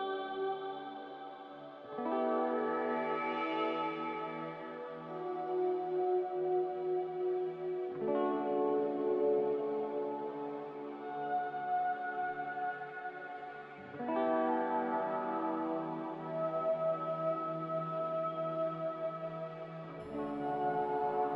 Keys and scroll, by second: 1.1-1.4 typing, 1.4 Return, 7.3 Return, 15.9 z.